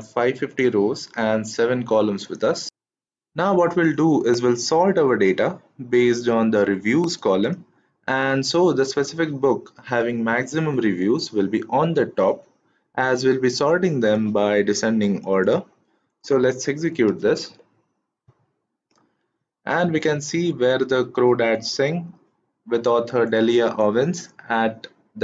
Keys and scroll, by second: 17.1 shift+Return.